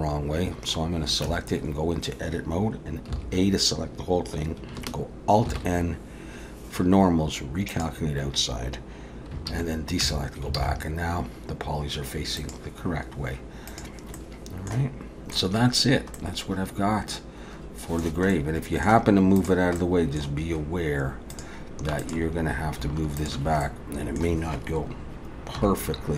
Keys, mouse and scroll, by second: 1.3 Tab, 3.1 a, 5.5 alt+n, 9.5 alt+a, 10.0 Tab, 10.6 alt+a, 12.4 click, 14.2 middle click, 16.2 middle click, 18.3 middle click, 19.4 click, 19.8 middle click, 21.3 click, 22.0 click, 23.2 shift+click, 23.6 middle click, 25.6 KP_3.